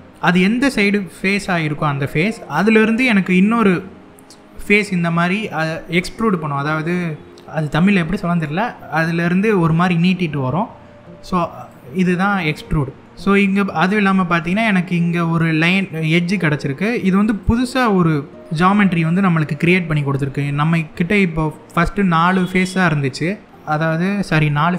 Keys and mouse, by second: 11.3 click, 13.5 middle click, 15.1 click, 16.9 click, 18.4 middle click, 22.2 middle click.